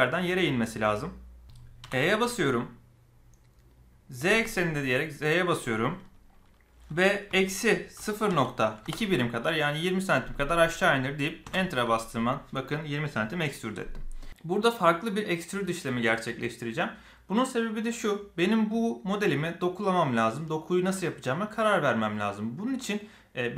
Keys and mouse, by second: 1.8 e.